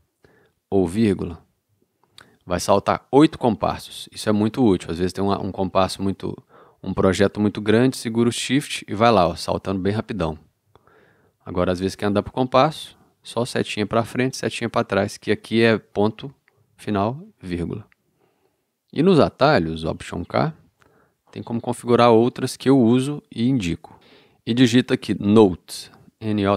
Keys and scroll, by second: 1.1 shift+,, 1.6 shift+., 2.1 shift+,, 8.6 shift+,, 10.3 shift+., 12.5 ., 16.5 ., 20.6 alt+k, 25.9 n.